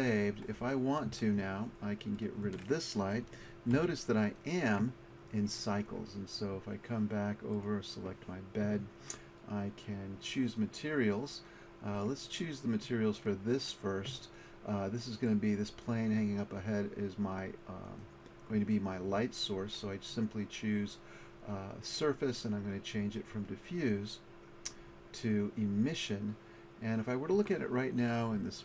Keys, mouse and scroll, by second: 2.2 right click, 3.0 right click, 3.4 right click, 3.8 x, 7.6 right click, 12.0 right click, 18.0-21.2 drag.